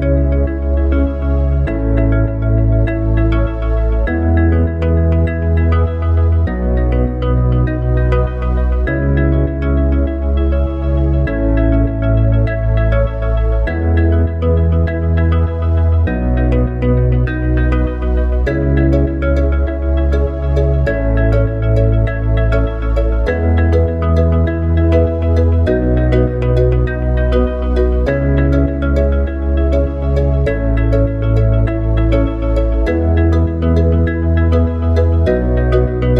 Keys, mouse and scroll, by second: 3.0 click, 5.5-8.6 middle drag, 10.4 s, 13.8 click, 22.0 s, 24.3 click, 27.0-31.5 drag.